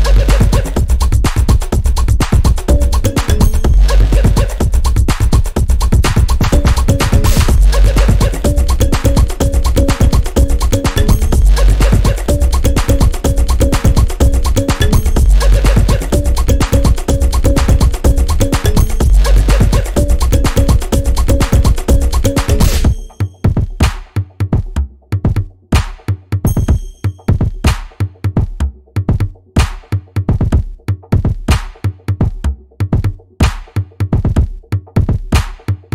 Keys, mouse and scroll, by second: 6.2 scroll up 1, 6.5-7.1 scroll down 3, 7.1 click, 7.2 typing, 8.5 p, 8.8 alt+scroll up 1, 9.2-16.0 drag, 17.0 scroll up 1, 17.2-17.5 scroll down 1, 17.5-17.9 scroll up 1, 18.2 click, 19.5-29.0 drag, 30.2 scroll down 1, 30.5 scroll up 1, 32.6 right click, 33.0-35.9 drag.